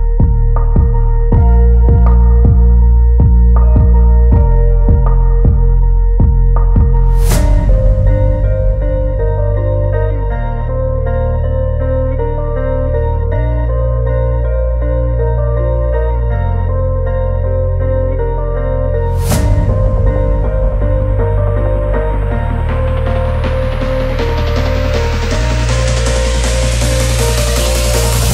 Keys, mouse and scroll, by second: 0.6 click, 6.5 middle click, 8.1 click, 10.1 click, 11.3 click, 11.9-12.5 scroll down 2, 12.7 middle drag, 12.7 scroll down 1, 13.3-13.6 scroll up 2, 13.9 click, 14.3 Tab, 15.3 middle click, 15.8-16.3 scroll up 3, 16.3 shift+middle click, 17.9 alt+click, 18.8 alt+click, 19.5 alt+click, 22.4 click, 25.1 click, 25.9 drag, 26.5 Tab, 27.1-27.5 scroll down 2, 27.5-28.3 shift+middle drag.